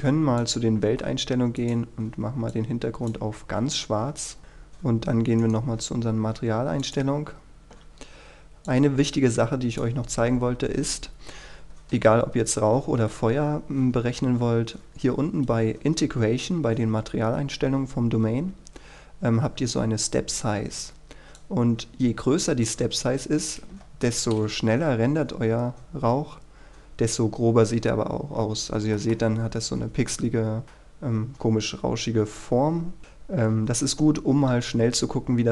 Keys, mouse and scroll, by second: 0.6-4.1 drag, 4.1-5.6 scroll down 1, 5.6 right click, 7.0-10.8 drag, 14.0 KP_3, 21.5-22.8 drag, 23.9 KP_0, 24.9 F12, 26.5-28.1 scroll up 1, 28.1 scroll down 1, 29.1 middle click, 30.1-30.6 scroll down 1, 30.6 middle click, 31.2-32.4 scroll up 1, 32.4-34.5 scroll down 1, 35.0-35.5 scroll up 1.